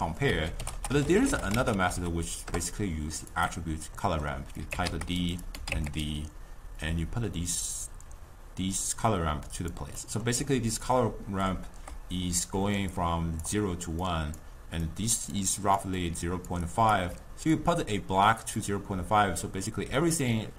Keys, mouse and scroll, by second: 0.8 t, 4.1 middle click, 4.7 click, 5.5 click, 6.9-10.0 drag, 10.0 middle click, 10.4-17.0 typing, 10.9 click, 12.3 click, 13.0 click, 15.0 click, 15.3 click, 15.6 click, 16.0 click, 16.8 click, 17.6-19.9 drag, 19.9 d, 20.4 click.